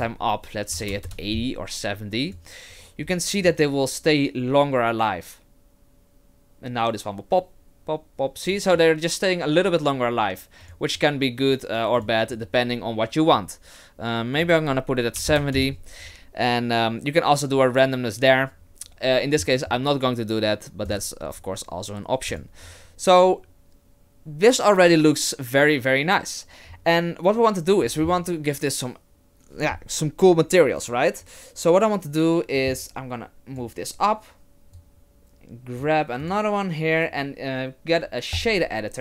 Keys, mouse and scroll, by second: 0.0 click, 2.3 click, 3.4 click, 10.6 click, 12.0 click, 14.4 click, 20.9 click, 22.3 click, 32.5 click, 34.8 click, 36.2 click.